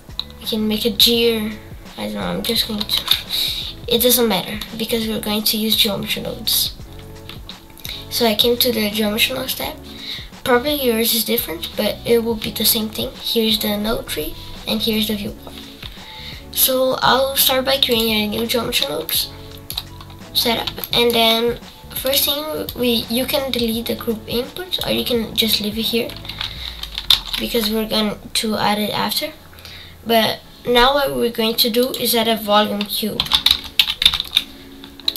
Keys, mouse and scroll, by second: 2.7-3.1 scroll up 4, 3.1-5.7 middle drag, 5.7 click, 6.5-14.3 scroll up 9, 17.9-26.3 drag, 26.3 Delete.